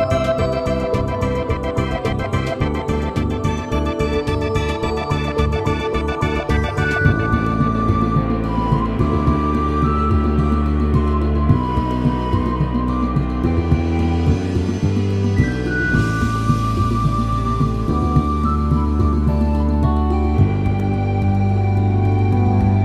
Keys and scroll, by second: 1.6 x, 3.5 x, 4.3 x, 5.3 x, 6.5 space, 7.6 x, 13.2 space, 14.9 x, 15.7 space, 18.6 x.